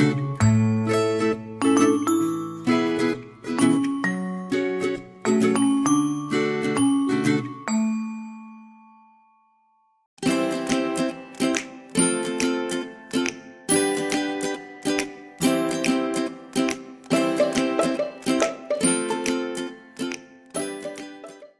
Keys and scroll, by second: 1.8 ctrl+g, 2.4 ctrl+g.